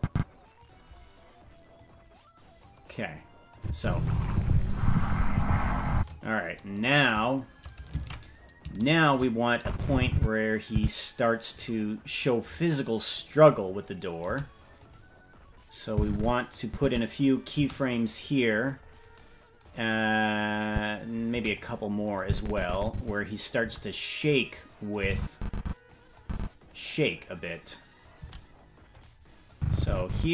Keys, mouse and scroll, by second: 1.7 click, 3.5-4.8 drag, 3.7 space, 5.9 space, 6.9-8.0 right drag, 8.0 ctrl+Tab, 8.9 shift+right click, 9.5-10.7 drag, 14.2 i, 15.9 click, 16.6 click, 17.5 i, 18.5-19.1 scroll up 11, 20.7 click, 21.3 i, 22.2-23.2 drag, 23.6 i, 24.9-25.9 drag, 26.2 click, 28.2 i, 29.5-30.3 drag.